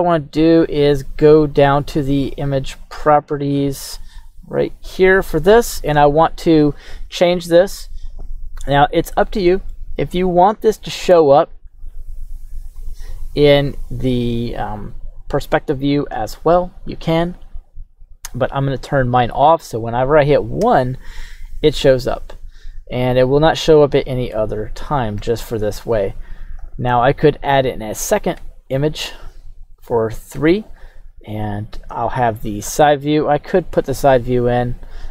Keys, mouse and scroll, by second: 1.5 click, 2.8 click, 4.5 click, 9.7-11.5 middle drag, 12.7 click, 13.8 click, 14.6 click, 17.1 click, 18.3 click, 20.7 KP_1, 28.4 KP_3, 31.7 shift+KP_3, 31.8 shift+a.